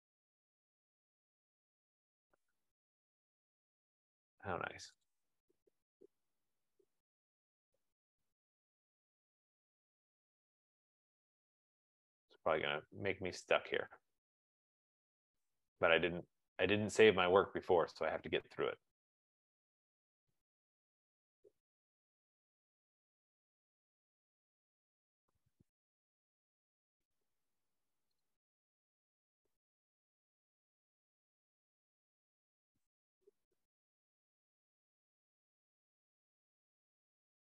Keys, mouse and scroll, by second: 1.0 click, 2.2 click, 3.1 click, 4.1 click, 5.3 click, 6.0 click, 6.8 click, 7.9 click, 8.7 Return, 8.9 Return, 9.2 Return, 10.7 Return, 11.3 Return, 11.8 Return, 12.0 Return, 12.5 Return, 12.9 Return, 13.1 Return, 13.9 Return, 14.4 Return, 14.7 Return, 14.9 Return, 15.1 Return, 15.3 Return, 15.7 Return, 15.9 Return, 16.3 Return, 16.5 Return, 16.7 Return, 17.0 Return, 17.1 Return, 17.8 Return, 18.0 Return, 18.3 Return, 18.7 Return, 18.8 Return, 19.1 Return, 19.2 Return, 19.5 Return, 19.8 Return, 20.3 Return, 20.4 Return, 20.6 Return, 21.0 Return, 21.1 Return, 21.6 Return, 22.1 Return, 22.2 Return, 22.5 Return, 22.6 Return, 22.8 Return, 23.0 Return, 23.2 Return, 23.5 Return, 24.7 Return, 26.4 Return, 26.6 Return, 26.8 Return, 27.8 Return, 28.0 Return, 28.2 Return, 28.9 Return, 29.0 Return, 29.1 Return, 29.4 Return, 29.9 Return, 30.2 Return, 30.3 Return, 30.8 Return, 31.0 Return, 31.4 Return, 31.6 Return, 32.0 Return, 34.5 Return, 36.1 F15.